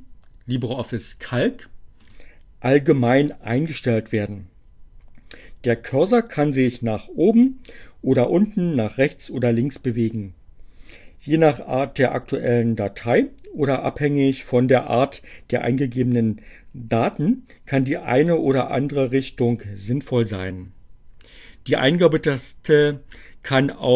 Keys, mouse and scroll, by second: 0.6 click, 1.4 click.